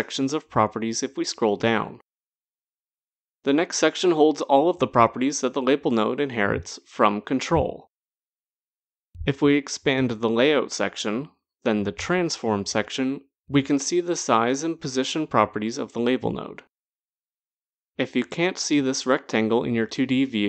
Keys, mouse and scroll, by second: 2.3-7.0 scroll down 5, 10.0 click, 10.9 click, 12.1 click, 13.0-13.6 scroll, 17.6 click.